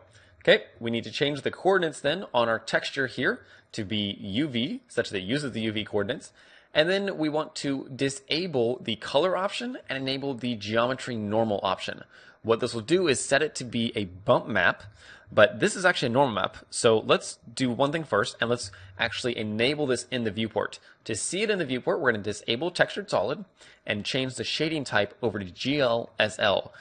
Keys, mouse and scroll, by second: 0.9-16.6 middle drag, 13.2 click, 15.7-16.1 scroll down 1, 16.1 scroll up 1, 19.4 n, 23.5-26.1 drag, 26.5-26.8 middle drag.